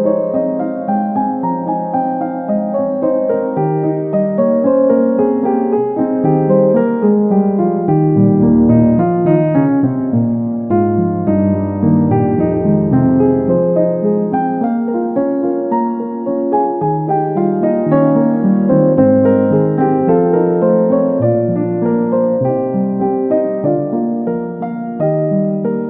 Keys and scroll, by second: 5.5 ctrl+a, 12.7 ctrl+a, 14.5 ctrl+z, 18.7 ctrl+a.